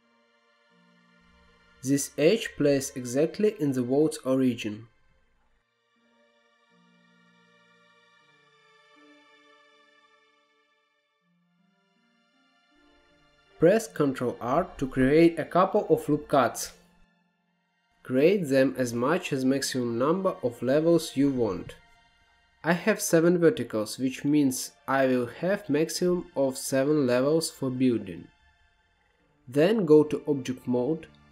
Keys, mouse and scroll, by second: 0.6 click, 2.5-9.5 drag, 9.5 middle click, 10.4-11.1 scroll up 2, 11.1-11.7 scroll up 3, 11.7-13.9 middle drag, 13.9 ctrl+r, 21.0 click, 21.6-22.3 scroll up 2, 22.3-24.4 middle drag, 24.4-26.5 scroll down 2, 28.5 Tab, 29.3 click, 29.9 shift+a.